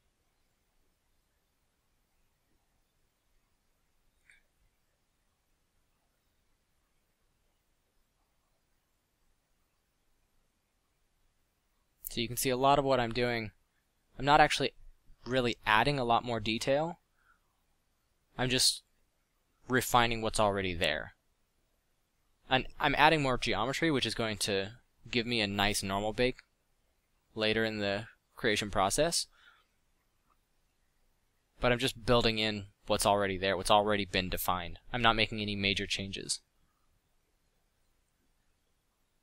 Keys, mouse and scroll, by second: 6.0 middle drag, 6.4 middle click, 6.6 middle click, 8.1 f, 12.1 f, 22.4 f, 24.8 f, 29.8 f, 34.6 f.